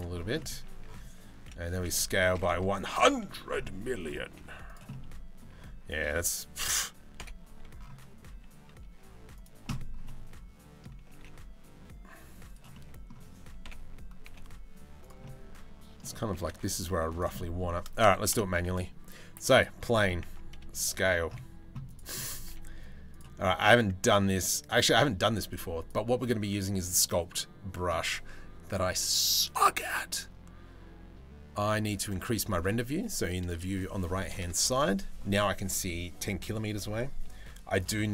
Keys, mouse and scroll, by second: 0.0 middle click, 0.3 Tab, 1.0 s, 3.4 middle click, 3.9 g, 4.5 middle click, 6.8 KP_7, 7.9 s, 9.7 middle click, 10.7 g, 12.3-12.7 middle drag, 13.3 KP_7, 14.1 g, 14.9 middle click, 15.9 g, 17.0 middle drag, 17.9 Delete, 18.3 shift+a, 19.9 Tab, 20.2 s, 22.1 s, 25.1 click, 25.5 click, 31.7-34.0 drag, 37.6 middle click, 37.6 s.